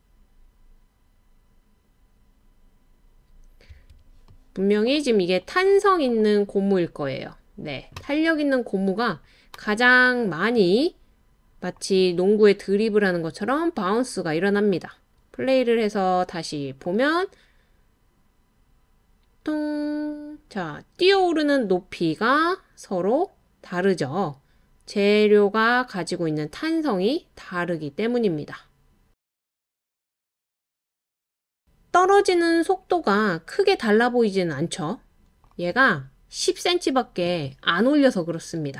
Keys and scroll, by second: 3.7 space.